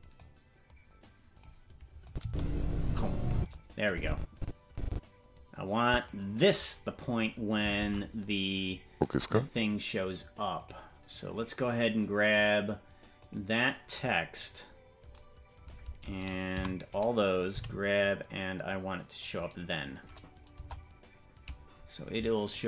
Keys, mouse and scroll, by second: 0.1-1.4 drag, 2.1-3.5 drag, 2.2 space, 3.4 space, 3.9-6.1 drag, 7.8 ctrl+Tab, 10.5 click, 13.1 click, 14.2-14.6 scroll down 4, 16.5 a, 17.5 g, 20.5 KP_0, 22.5 click.